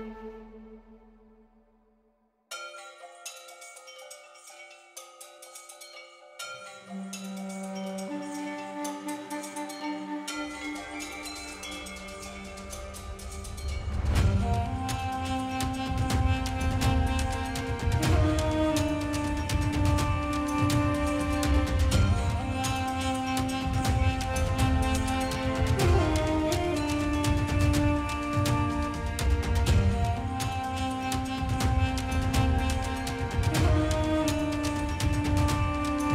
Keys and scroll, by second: 1.9 ], 2.2 [, 3.2 [, 5.0 space, 5.5 space, 7.5-10.2 typing, 12.8 s, 13.6 ], 16.6 space, 16.9 ], 18.7 ctrl+space, 20.7 ctrl+alt+z, 20.9 space, 23.8 space, 24.5 space, 25.8 space, 26.1 space, 26.7 4, 27.9 space, 30.2-32.2 typing, 34.0 space, 34.9 space.